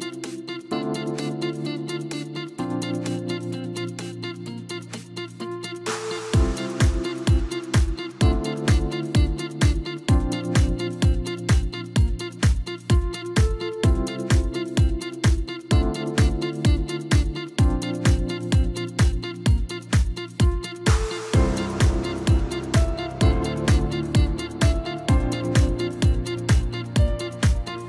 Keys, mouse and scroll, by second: 0.7 Tab, 2.3 drag, 3.4 click, 4.5-5.2 drag, 5.8 click.